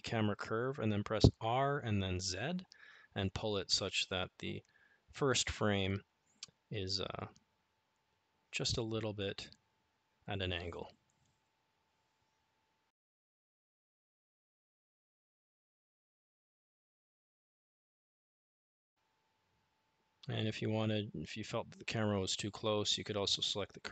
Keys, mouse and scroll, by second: 10.7 click, 18.1 click.